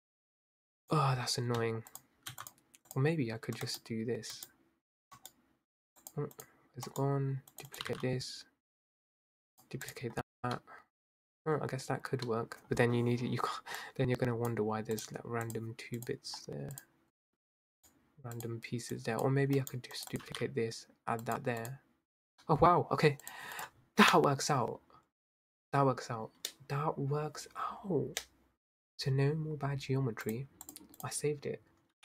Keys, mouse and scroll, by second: 0.0 click, 0.8 click, 2.1 shift+click, 2.4 x, 3.0 click, 6.1 click, 6.4 click, 7.5 right click, 7.9 g, 9.9 click, 10.5-11.5 middle drag, 11.5-12.2 scroll down 2, 12.2 scroll down 1, 12.4-13.0 middle drag, 13.0 scroll up 2, 13.3-13.8 scroll down 3, 13.8 click, 15.0 click, 15.5 drag, 16.1 drag, 16.4-16.7 scroll up 2, 16.8 drag, 17.2-17.5 scroll down 2, 17.8 click, 18.3 click, 19.7 right click, 20.1 g, 21.7 click, 22.4-23.3 middle drag, 23.6 click, 30.4 click, 30.8 click, 31.1 click.